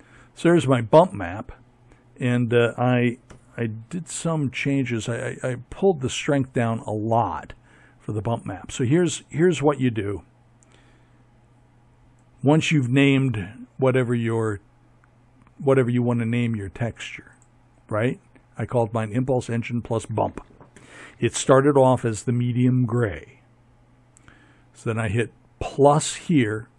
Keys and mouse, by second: 1.1 ctrl+Left.